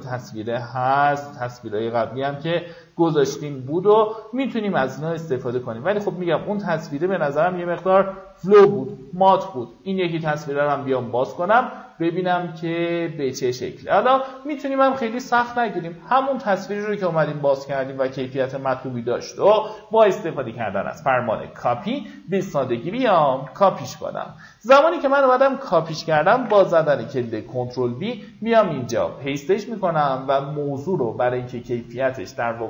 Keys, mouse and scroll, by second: 8.1 middle click, 10.3 click, 12.3-13.3 middle drag, 14.2-15.3 drag, 18.0 right click, 21.4 click, 22.5 Tab, 24.8 alt+scroll down 1, 26.0 ctrl+v, 27.3 click, 28.9 right click.